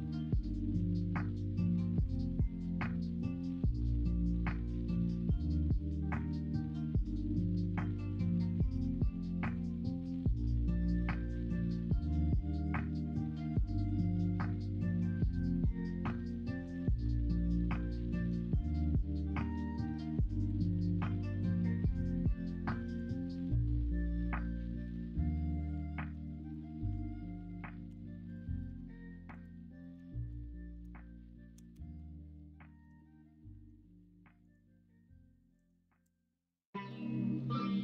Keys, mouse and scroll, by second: 2.2 ctrl+z, 2.6 middle click, 5.3 middle click, 7.7 g, 13.8 ctrl+b, 18.0 middle click, 18.7 middle click, 20.0 3, 20.6 middle click, 21.3 e, 23.4 middle click, 24.7 middle click, 25.2 middle click, 25.5 Tab, 26.1 Tab, 26.8 l, 27.8 p, 28.6 Tab, 29.8 middle click, 31.7 ctrl+KP_Subtract, 32.8 middle drag, 37.4 middle click.